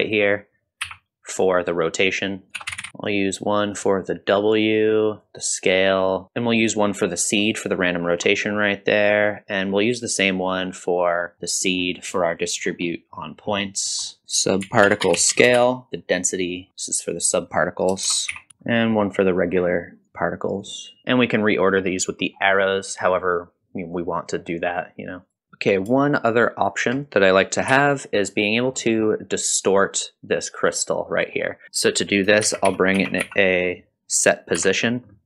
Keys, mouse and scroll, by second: 0.8 n, 2.5-2.9 drag, 2.9 middle click, 2.9 scroll up 2, 3.1-3.8 drag, 4.5-5.3 drag, 6.2-7.3 drag, 6.2 scroll up 1, 7.5 middle click, 8.1-8.4 scroll down 2, 8.3 middle click, 9.6-11.3 drag, 11.3 middle click, 11.7-12.1 scroll up 1, 12.1 middle click, 12.6-12.9 scroll down 1, 12.9 middle click, 13.4-13.9 scroll down 2, 13.7 middle click, 14.0 scroll up 1, 14.2-16.1 shift+drag, 14.2 scroll down 1, 15.9 middle click, 16.7-18.6 drag, 16.7-17.4 scroll down 3, 18.7 middle click, 20.0 click, 20.0-20.4 scroll down 1, 20.6-21.0 drag, 22.3 scroll down 1, 24.7 click, 25.3 click, 25.4 middle click, 25.4-25.9 scroll down 2, 25.4 n, 26.3 shift+click, 26.3 shift+right click, 27.7 g, 28.8 middle click, 31.1 middle click, 31.6 scroll up 1, 31.6 shift+a, 32.5 shift+a, 33.0 s.